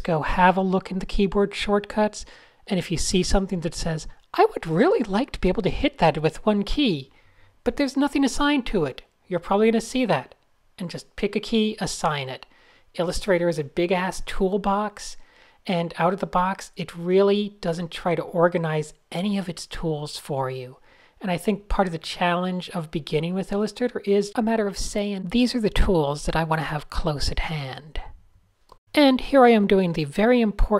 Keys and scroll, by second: 0.1 Tab, 2.2 super+-, 2.6 super+v, 4.3 shift+super+a, 4.5-11.0 typing, 5.1 shift+super+a, 11.1 shift+super+Tab, 16.7 Tab, 17.1-19.5 typing, 21.9 super+a, 22.0 super+a.